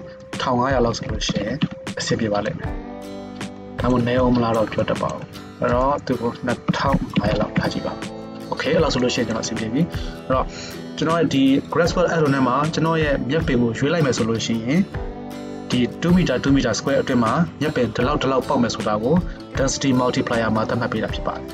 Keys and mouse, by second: 1.4 KP_0, 3.6 shift+click, 3.6 shift+right click, 3.8 shift+click, 3.8 shift+right click, 4.0 drag, 4.0 right drag, 7.3 KP_0.